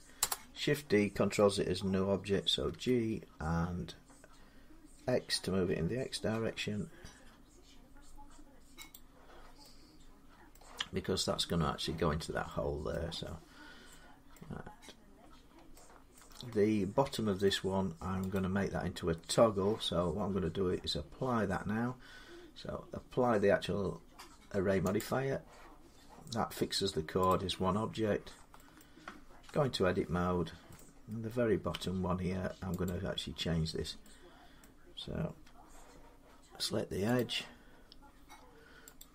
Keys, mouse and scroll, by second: 0.0 Return, 2.5 g, 6.1 x, 8.7 click, 10.4 middle click, 12.7 middle click, 14.2 middle click, 14.8-15.3 scroll down 1, 16.0 shift+middle click, 16.4 middle click, 16.5 middle click, 16.5 middle click, 16.9 shift+middle click, 17.3 shift+middle click, 18.2 click, 24.9 click, 25.7 scroll down 3, 27.1 click, 27.8-28.4 scroll up 3, 28.6 middle click, 29.4 Tab, 29.9-30.5 scroll up 2, 30.6 middle click, 32.7 click, 34.4 middle click, 37.0 click, 38.8 alt+click.